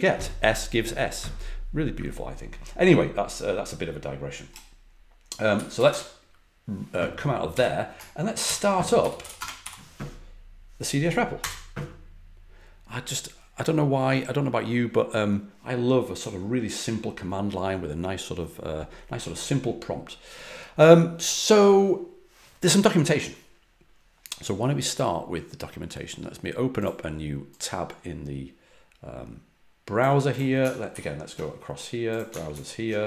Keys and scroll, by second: 5.7 typing, 7.5 typing, 8.4 ctrl+l, 8.7-10.1 typing, 11.4 typing, 30.9 alt+super+Left, 32.5 alt+super+Right.